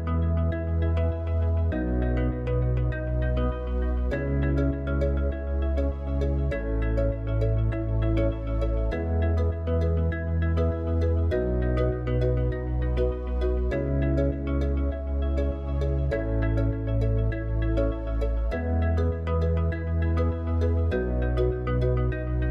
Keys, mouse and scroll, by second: 3.0 KP_7, 6.5 g, 12.9-15.0 middle drag, 15.0 click, 20.0 click.